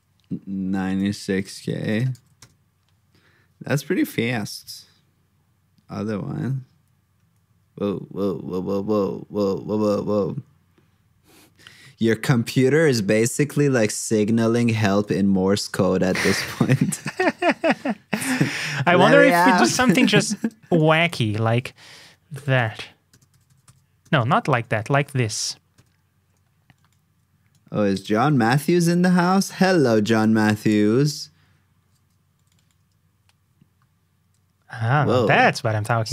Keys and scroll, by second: 1.6 super+c, 2.2 super+v, 28.1 super+c, 28.7 super+v.